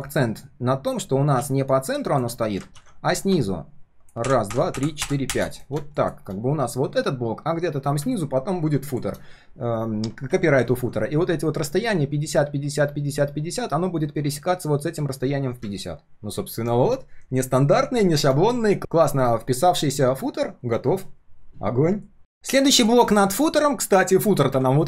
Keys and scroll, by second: 2.7 ctrl+z.